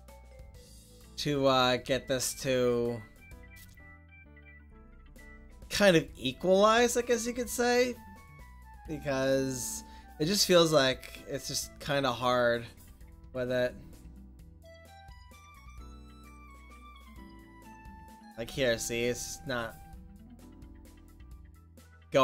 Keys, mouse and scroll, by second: 7.5 middle click, 8.2-9.1 middle drag, 11.0-14.7 middle drag, 14.7-17.1 drag, 16.5-18.2 middle drag, 17.8-19.4 drag, 20.4-22.2 middle drag.